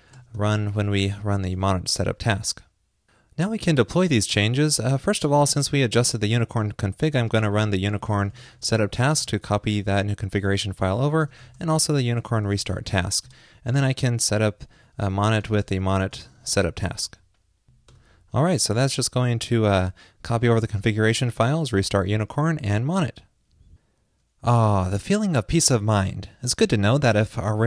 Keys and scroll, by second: 0.0 ctrl+shift+d, 1.6 super+s.